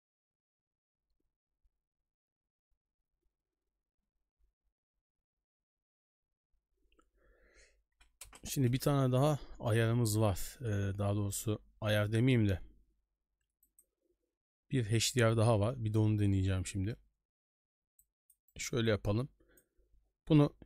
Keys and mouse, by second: 8.2 ctrl+space, 11.3-13.8 drag, 15.1 middle click, 16.7 Escape, 16.8 Escape, 18.1 click, 18.6 right drag, 18.7 b, 20.5 shift+d.